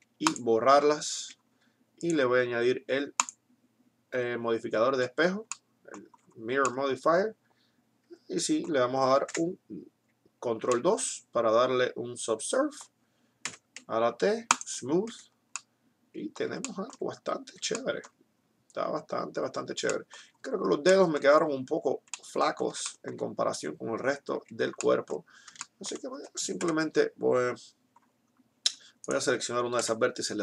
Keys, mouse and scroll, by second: 1.3 Tab, 2.1 click, 3.9-5.4 middle drag, 4.9 z, 9.4 ctrl+2, 13.4 t, 14.4 click, 15.1 t, 24.4 Tab, 26.6 KP_7, 29.8 KP_Decimal.